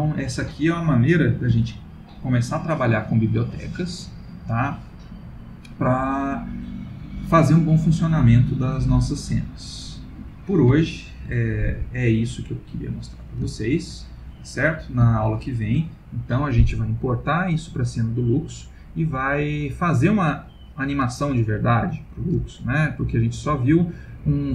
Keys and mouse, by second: 0.8 middle click, 1.6 ctrl+s, 9.7 middle click, 10.7 shift+middle click, 11.5 middle click, 13.5 shift+middle click, 14.0 middle click, 14.2 middle click, 14.7 middle click, 15.1 shift+middle click, 15.6 shift+middle click.